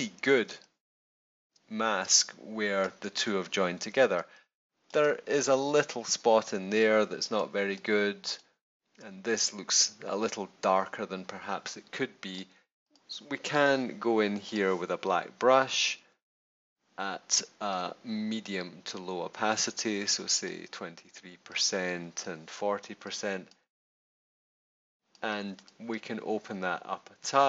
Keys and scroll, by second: 0.4 space, 2.0 space, 4.1 space, 6.4 space.